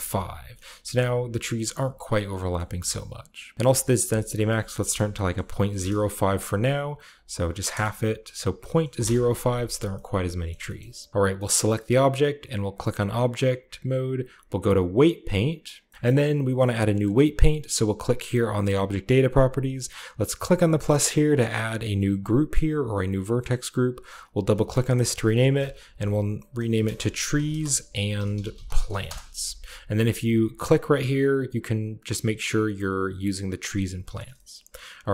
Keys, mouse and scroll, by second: 0.3-1.4 scroll down 1, 0.5-2.0 middle drag, 1.4-3.5 scroll up 1, 2.5-3.5 middle drag, 3.6-4.7 drag, 4.8-5.6 typing, 5.7 Return, 6.4 click, 7.0 click, 8.5-8.8 typing, 8.9 Return, 9.6-10.4 scroll down 1, 10.4-12.6 shift+middle drag, 12.6-14.4 drag, 14.9 click, 15.8-17.3 shift+middle drag, 18.5 click, 19.2-20.3 drag, 20.3 middle click, 24.0 click, 24.1 click, 25.3-29.5 typing, 30.2 scroll down 1, 30.9 click, 33.5 drag, 33.9-35.1 shift+middle drag, 34.7-35.1 shift+scroll up 2.